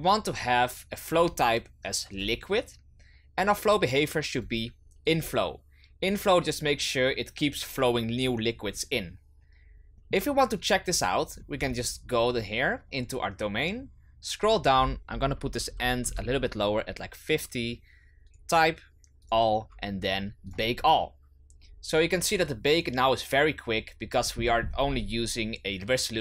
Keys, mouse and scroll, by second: 4.3-10.0 drag, 10.0-10.6 middle drag, 10.6 right click, 11.2-12.8 scroll down 18, 14.5-23.7 drag, 24.1-25.4 scroll up 16.